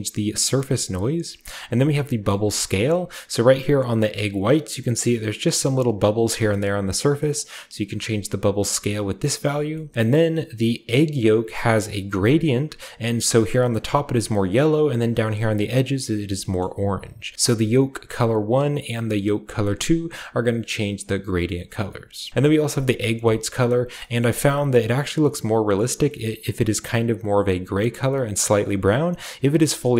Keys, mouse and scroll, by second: 0.8 right click, 1.7-2.7 shift+drag, 2.7-4.1 shift+middle drag, 2.7-3.5 shift+scroll up 1, 3.5-4.2 shift+scroll up 1, 7.3-9.3 drag, 9.1 right click, 9.3-9.9 middle drag, 9.6-10.1 scroll down 2, 10.1-16.2 shift+scroll up 2, 16.2 scroll down 2, 16.6-17.3 shift+middle drag, 17.3 shift+click, 17.9 drag, 18.5 click, 20.4 click, 21.0-23.2 drag, 22.8-26.8 scroll down 2, 23.2-23.9 shift+middle drag, 24.1-26.8 shift+middle drag, 26.8 click, 29.1-29.9 drag.